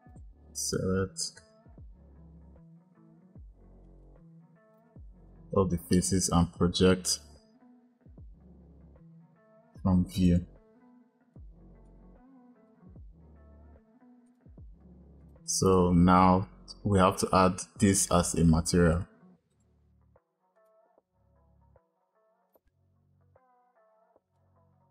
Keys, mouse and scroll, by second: 2.4 a, 4.0 click, 10.9-11.7 drag, 12.7 s, 15.1 click, 18.8-19.9 drag, 22.4-24.9 drag.